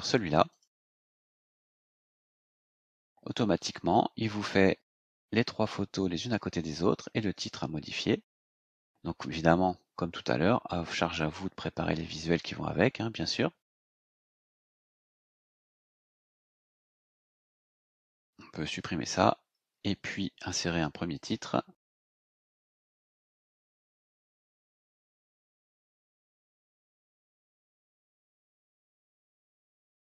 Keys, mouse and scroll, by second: 0.4 click, 2.1 click, 3.2 scroll down 2, 4.2 scroll up 2, 5.9-6.2 scroll down 2, 8.3 scroll up 2, 12.9 scroll down 2, 13.5 scroll down 2, 14.4-15.7 drag, 16.3 BackSpace, 17.0 shift+;, 17.3-18.5 drag, 19.3 Delete, 21.1 click, 23.8 click, 25.5-30.0 typing.